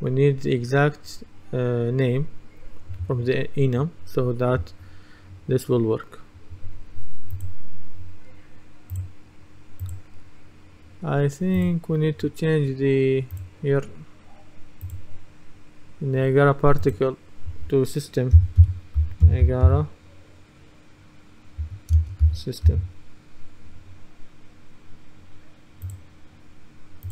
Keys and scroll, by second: 18.4-20.2 typing, 21.7 a, 22.0 space, 22.3 s.